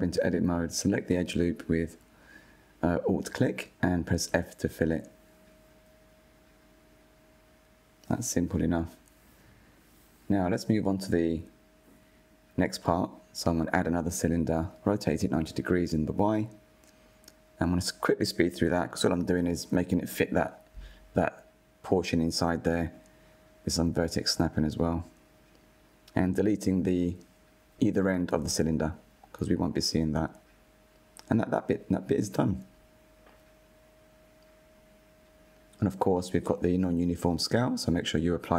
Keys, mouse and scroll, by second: 0.1 click, 0.4 Tab, 1.4 2, 2.1 alt+click, 3.3 f, 4.1 click, 4.5-5.2 middle drag, 5.2 Tab, 5.6 click, 5.9-9.2 middle drag, 8.7 KP_1, 11.2 shift+a, 14.3-14.8 scroll down 2, 14.8 click, 15.8 click, 16.6 s, 17.8 click, 17.9 scroll up 3, 18.1 drag, 19.2 s, 19.9 click, 20.5 Tab, 21.1-22.4 alt+drag, 22.6 click, 23.6 alt+click, 23.8 click, 24.5 click, 24.7 Tab, 24.8 right click, 25.6 click, 25.9-26.6 right drag, 26.6-27.3 middle drag, 27.3 /, 27.6 middle click, 27.6 Tab, 27.9 click, 28.2 middle click, 28.4 shift+click, 28.8 Delete, 29.3 Tab, 29.9 click, 30.4 click, 30.7-31.1 scroll down 3, 31.1 /, 31.3 scroll down 2, 31.4 shift+middle drag, 31.7 KP_1, 32.0 click, 32.1 scroll up 4, 32.6 Tab, 32.8 3, 32.8 a, 33.0 s, 34.0 Tab, 34.1-34.6 scroll down 5, 34.8 drag, 35.2-37.6 drag, 37.6 ctrl+a.